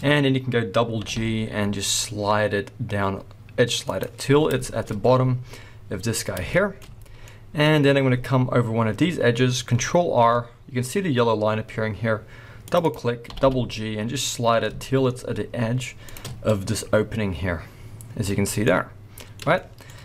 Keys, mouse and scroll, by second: 0.7-1.0 scroll up 1, 1.0 g, 4.0 click, 4.6 shift+middle click, 4.8 scroll up 1, 5.7-6.2 scroll up 1, 6.2-6.5 scroll down 2, 6.5 shift+middle click, 6.9 scroll down 2, 7.2 middle click, 7.4 middle click, 7.8-10.1 scroll down 1, 10.1 ctrl+r, 12.9 click, 13.2 g, 16.1 shift+click, 16.2 scroll up 1, 18.2-18.6 scroll down 1, 18.6 middle click, 19.6 shift+middle click.